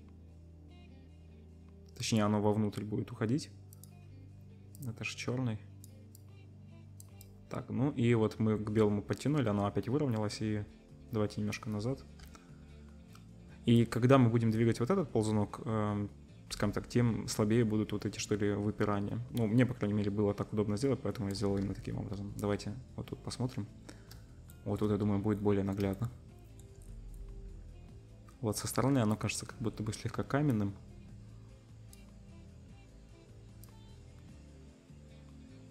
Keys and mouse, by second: 3.8-13.7 middle drag, 21.6 z, 24.1-24.7 shift+middle drag, 29.7-35.7 middle drag.